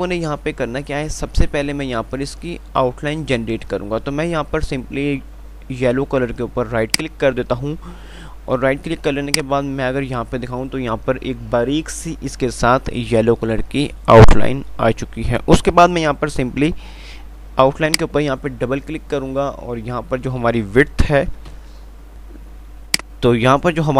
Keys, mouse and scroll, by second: 7.1 right click, 9.0 F2, 9.5 click, 9.8 F2.